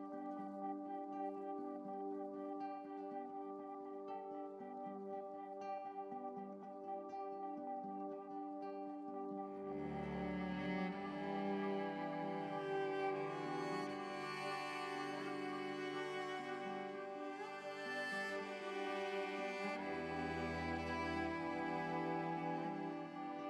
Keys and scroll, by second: 8.0 super+i, 17.7 ctrl+z.